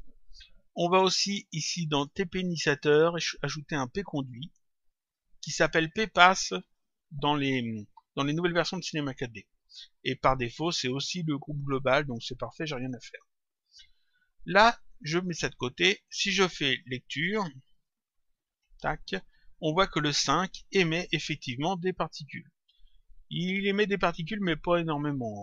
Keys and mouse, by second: 2.5 click, 4.2 click, 5.8 click, 15.3 click, 17.7 click.